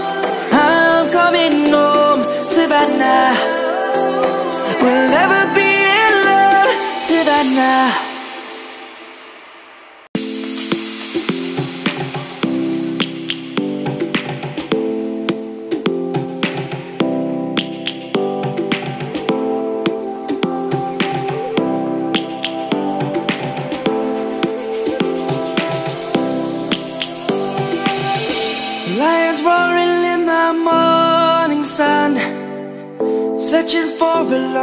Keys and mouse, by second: 0.4 middle click, 2.5 middle click, 7.6 middle click, 8.4 click, 9.1 Tab, 11.1 click, 17.3 Tab, 19.9 Tab, 20.4 middle click, 21.1 click, 22.2 shift+middle click, 22.9 click, 23.5 Tab, 24.1 click, 25.4 shift+d, 26.0 shift+s, 27.4 right click, 28.2 ctrl+z, 28.7 shift+s, 29.7 shift+s, 30.6 click, 33.3 Tab, 33.9 shift+s.